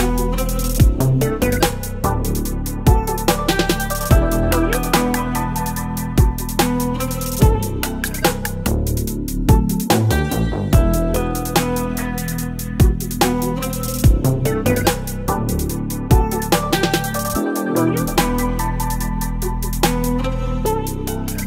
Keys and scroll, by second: 1.3 Return, 8.5 ctrl+i, 9.2 b, 11.4 [, 12.7 [, 19.2 v.